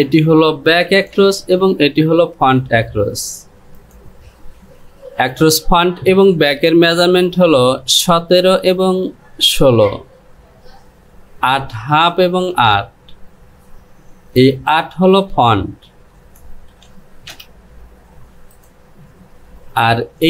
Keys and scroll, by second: 4.2 Delete, 16.3 Down.